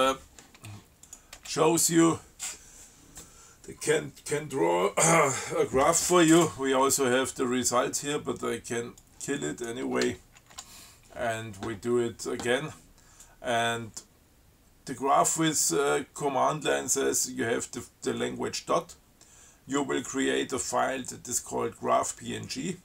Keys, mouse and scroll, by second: 1.3 click, 1.6 space, 9.2-10.1 drag, 10.6 ctrl+w.